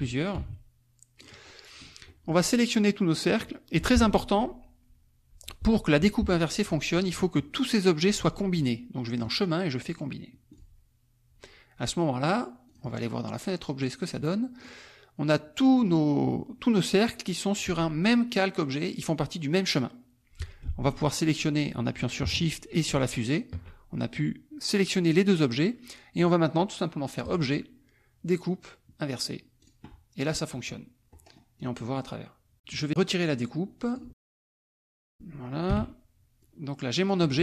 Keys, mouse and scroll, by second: 1.4 middle click, 2.1 middle click, 4.9-6.9 drag, 9.2 click, 10.6 click, 12.2 click, 14.1 click, 23.0 shift+click, 27.3 click, 29.7 click, 30.1 click, 31.1 click, 31.7 click, 32.8-34.0 right drag, 34.0 click, 35.0 click, 35.7 Delete, 36.4-37.4 drag.